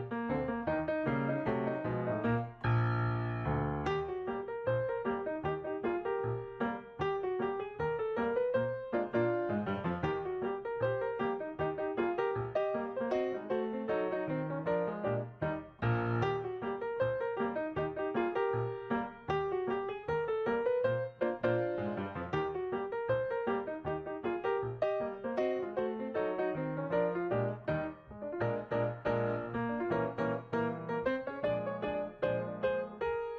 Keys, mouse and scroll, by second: 2.1 ctrl+s, 14.1 right click, 18.8 right click, 23.7 typing, 24.8 Return, 29.8 double click.